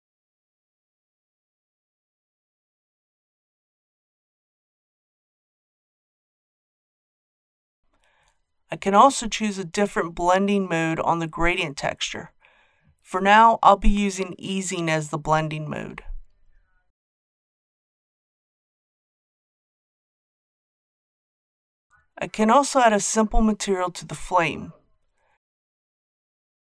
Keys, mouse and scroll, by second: 21.9-22.2 scroll down 1, 22.6-23.8 shift+middle drag, 24.6-26.7 drag.